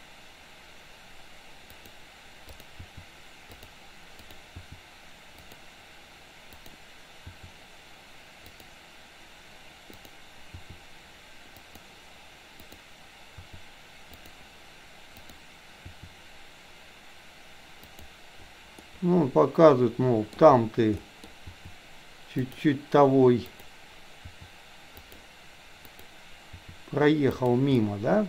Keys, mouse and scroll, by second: 2.5 click, 2.8 r, 4.1 click, 4.5 r, 6.5 click, 7.1 r, 10.0 click, 10.5 r, 12.6 click, 13.3 r, 15.1 click, 15.9 r, 18.8-20.3 middle drag, 21.0 middle click, 21.5 r, 23.5 click, 24.3 r, 25.9 click, 26.5 r, 27.8-28.2 middle drag.